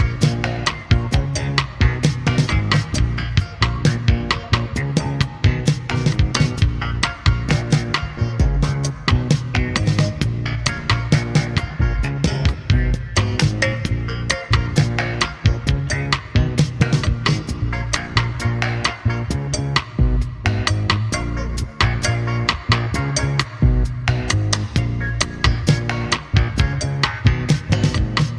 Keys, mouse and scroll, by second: 6.8-9.1 drag, 9.1-12.4 middle drag, 12.0-12.4 scroll up 2, 13.1 middle click, 14.5 click, 15.0-22.1 middle drag, 22.1 ctrl+space, 23.5-24.8 middle drag, 25.8 q, 28.1-28.3 scroll up 2.